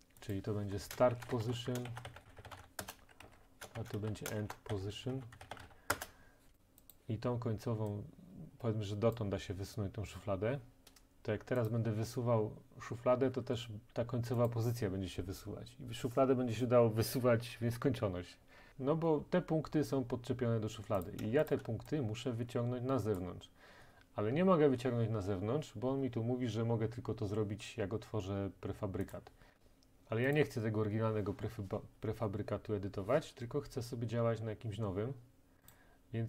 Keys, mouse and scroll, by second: 0.4 click, 0.7 F2, 1.2-5.6 typing, 2.8 Return, 3.2 Down, 5.9 Return, 6.5 click, 6.9 click, 6.9 typing, 9.1 click, 14.5 click, 21.1 click, 21.5 shift+click, 23.2 click, 29.1 click, 30.4 click, 35.7 click.